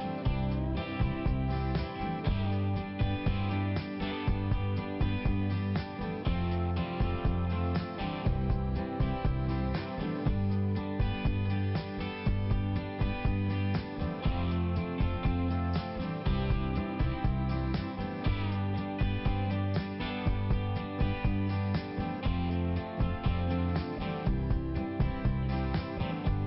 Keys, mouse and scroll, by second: 1.5 click, 3.3 click, 4.8 click, 7.3 click, 8.4 click, 9.1 click, 10.5 click, 13.7 middle click, 17.9 click, 18.9 click, 22.2 click, 23.2 click.